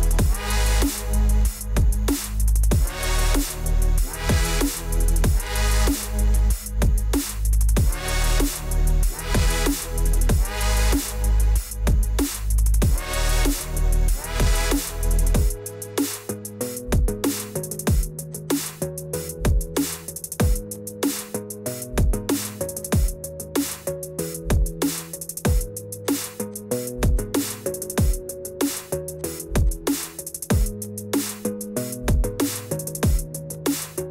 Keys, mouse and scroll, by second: 2.1 click, 5.5 click, 7.4 click, 7.8 click, 8.5 click, 8.8 click, 9.8 click, 10.7 click, 11.4 click, 12.1 click, 13.1 click, 13.7 click, 15.3 click, 15.9 click, 16.3 click, 17.5 click, 17.9 click, 18.3 click, 18.4 click, 19.4 click, 19.7 click, 20.3 click, 21.6 click, 22.2 click, 22.5 click, 22.6 click, 22.8 click, 23.2 click, 24.0 click, 26.8 click, 29.0 click, 29.4 click, 29.7 click, 30.7 click, 30.9 click, 32.8 click, 33.3 click, 33.9 click.